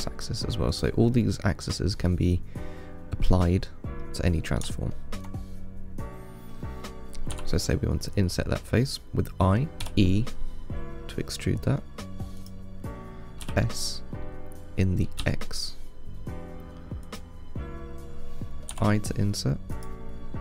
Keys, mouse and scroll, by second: 1.4-7.6 middle drag, 10.1 e, 13.7 s.